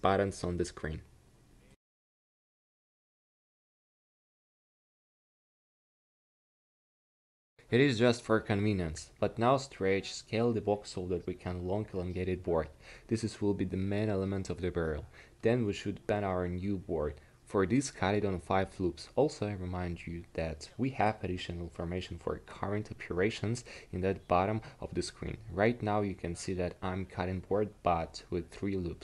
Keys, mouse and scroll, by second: 0.3 Escape, 1.0 s, 11.3 s, 15.5 Tab, 17.4 ctrl+r, 28.2 ctrl+r.